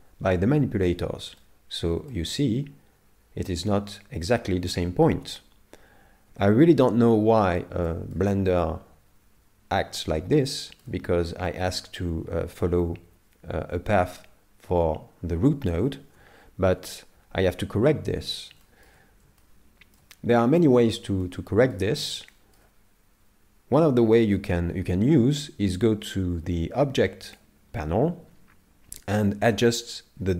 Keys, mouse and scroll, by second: 1.4 middle click, 2.1 shift+middle click, 6.3 KP_7, 7.2 scroll down 2, 7.9 shift+middle click, 10.6 shift+middle click, 11.3 middle click, 16.8 KP_7, 18.6 shift+middle click, 19.4 shift+middle click, 21.2 shift+middle click, 22.3 shift+middle click, 27.3 click.